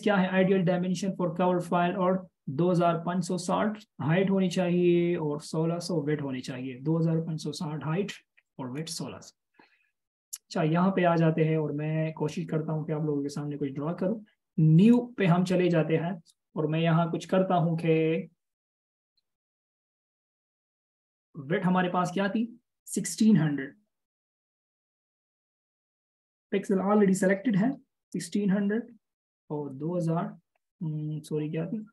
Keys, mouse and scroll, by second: 24.4 typing, 27.4-28.4 typing.